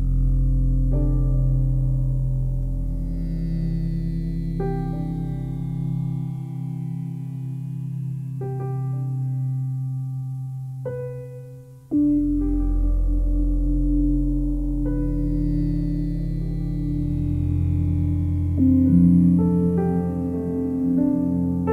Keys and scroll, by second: 0.1 9, 1.1 5, 1.8 Tab, 2.1 2, 17.1 Delete.